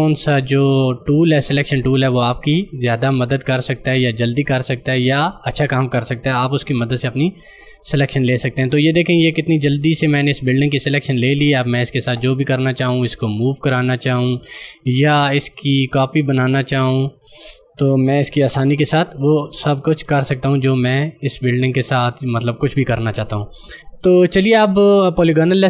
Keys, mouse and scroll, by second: 5.6 right click, 6.0 click, 8.3 scroll down 1, 13.0 click, 17.3 ctrl+alt+z, 17.5 ctrl+scroll up 1, 18.4 ctrl+j.